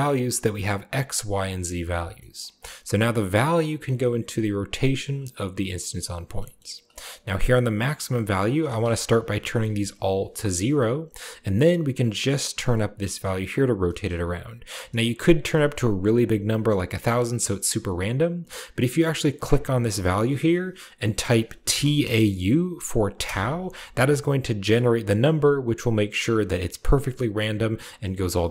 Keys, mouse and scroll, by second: 2.2-3.2 scroll up 1, 2.3 middle click, 2.4 click, 3.2-4.6 middle drag, 3.2-4.6 scroll up 1, 6.2 middle click, 6.4-7.7 scroll up 1, 6.9 middle click, 7.7-8.8 scroll up 1, 8.3 click, 9.4 0, 9.5 Return, 11.6-13.6 drag, 13.7 click, 14.9-18.1 drag, 19.3-20.8 drag, 21.1-21.6 typing, 23.1 Return, 24.0-26.1 scroll up 1.